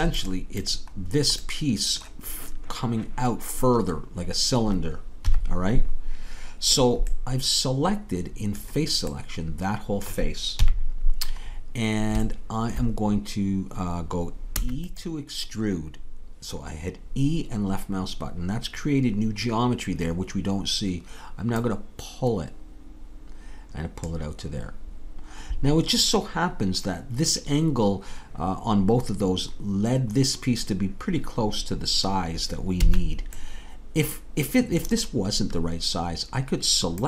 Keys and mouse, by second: 5.3 KP_3, 10.6 KP_3, 14.6 e, 15.1-18.1 drag, 21.6-24.0 drag, 32.9 a, 33.4-36.3 middle drag.